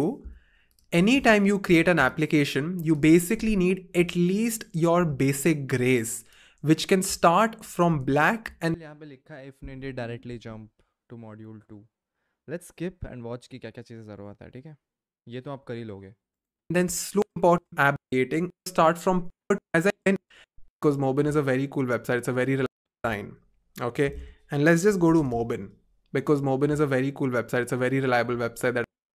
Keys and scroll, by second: 4.9 f, 20.7 Return, 20.7 typing, 26.0 typing, 28.1 typing.